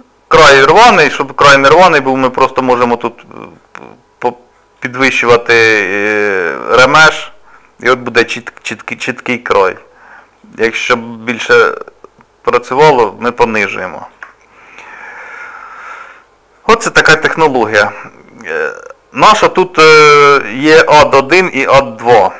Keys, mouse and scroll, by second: 0.4 click, 2.0 click, 7.7-8.2 scroll up 2, 8.2 middle click, 10.4 shift+click, 14.7 middle click, 15.5 scroll down 1, 16.3 middle click, 17.5 shift+middle click, 17.7-18.6 scroll down 1, 20.5 click, 22.1 click.